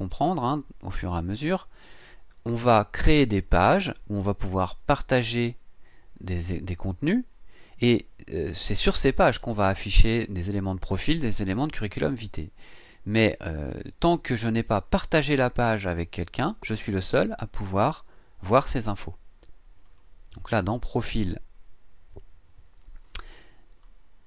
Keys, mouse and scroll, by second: 19.8 click.